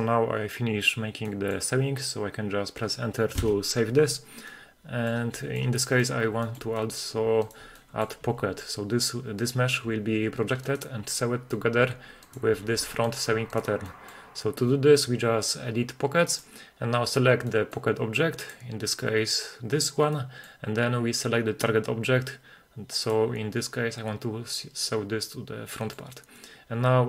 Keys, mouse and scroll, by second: 1.3 middle drag, 4.3 Return, 4.3 scroll down 1, 4.5-5.1 middle drag, 5.5 shift+middle drag, 5.8 middle drag, 6.5 shift+middle click, 6.8 middle click, 7.5 right click, 7.8 middle drag, 8.3 g, 9.5 right click, 9.9 g, 10.7 right click, 11.1-11.6 middle drag, 12.3 right click, 12.8 g, 13.1 right click, 13.5 right click, 13.9 middle drag, 14.3-15.6 scroll up 2, 16.4-18.6 drag, 17.5 middle click, 18.6 middle click, 20.2 middle click, 23.1 click, 25.8 middle click.